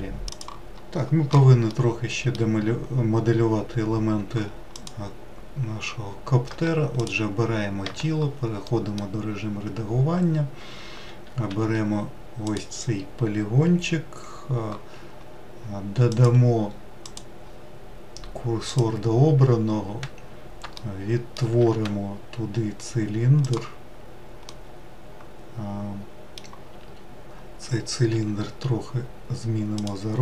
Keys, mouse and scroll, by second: 1.7-2.9 middle drag, 2.9-3.7 scroll up 2, 4.7 click, 6.5 Tab, 7.0 click, 7.8 Tab, 8.6 middle click, 9.3-9.7 scroll up 2, 11.5 3, 12.5 click, 16.1-19.3 drag, 20.8 shift+middle click, 21.7 shift+a, 24.5-27.7 middle drag, 28.1 s.